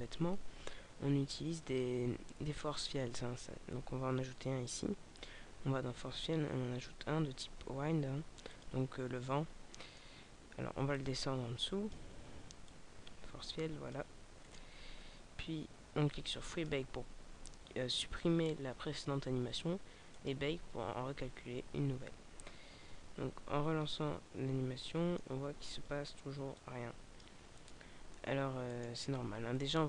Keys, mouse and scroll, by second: 1.6 shift+a, 9.4-9.8 scroll down 2, 9.8 middle click, 11.0 click, 14.4 right click, 16.4 click, 20.2 click, 23.9 middle click, 25.8 alt+a, 26.6 click, 28.8 right click.